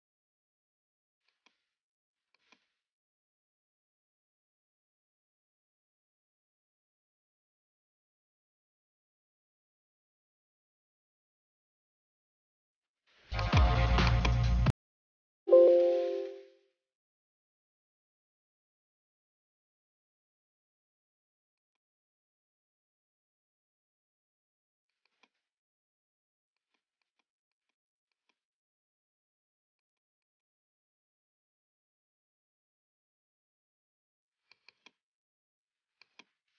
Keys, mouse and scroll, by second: 1.4 click, 2.4 click, 2.7 ctrl+c, 2.9 ctrl+d, 4.1 click, 5.7-8.9 typing, 13.5 click, 13.7 right click, 14.2 click, 15.3-20.1 typing, 21.7 click, 22.3-23.9 typing, 24.9 click, 25.1 click, 26.6 click, 27.1 click, 27.5-28.3 typing, 28.2 click, 29.2 click, 30.0 click, 30.2-31.0 typing, 30.4 click, 32.3-33.6 typing, 34.5 click, 34.7 click, 36.1 click.